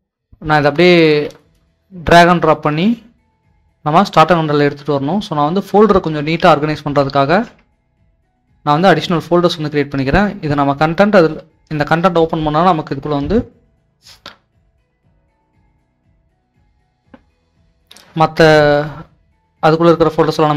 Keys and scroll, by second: 1.1 alt+Tab, 6.3 alt+Tab, 7.4 alt+Tab.